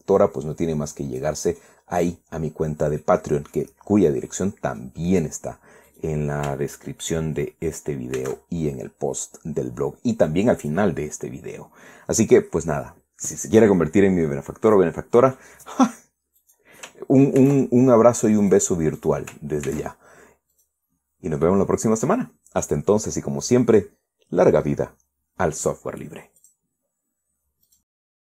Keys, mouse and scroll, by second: 0.9-2.1 drag, 2.3 middle click, 2.8 scroll up 1, 3.0-3.5 scroll down 1, 3.5 scroll down 1, 3.7 middle click, 5.0 middle click, 5.7 scroll up 1, 6.6 right click, 8.9 ctrl+a, 11.3 click, 17.1 right click, 18.1 ctrl+a, 19.1 click, 19.7 click, 20.4 ctrl+a, 21.2 click, 21.6-22.4 scroll down 3, 27.1 click.